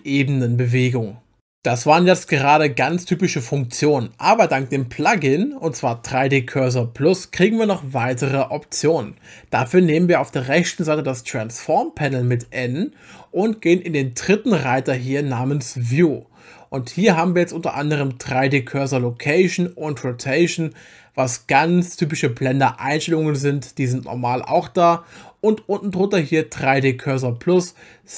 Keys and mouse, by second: 0.8 click, 12.3 n, 15.8 click.